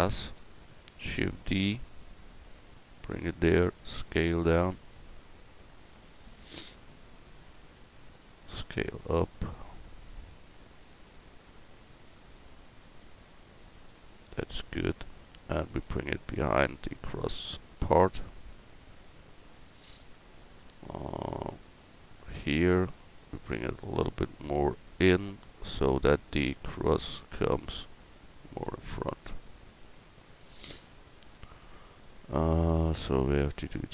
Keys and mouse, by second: 0.9 shift+d, 2.0-3.3 drag, 3.3 middle click, 3.8 s, 5.4-7.3 drag, 6.5 KP_1, 7.5-9.7 drag, 8.5 s, 10.8-13.5 drag, 13.5-15.0 middle drag, 15.0-16.4 drag, 25.8 Tab, 26.1-27.3 right drag.